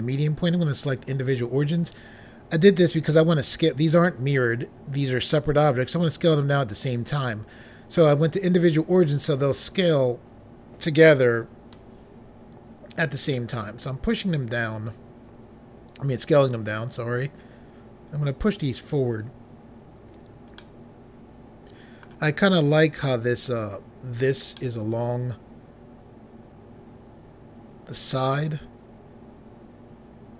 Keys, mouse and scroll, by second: 0.9 click, 11.7 s, 16.2 click, 18.1 click, 20.6 middle click, 24.5 middle click.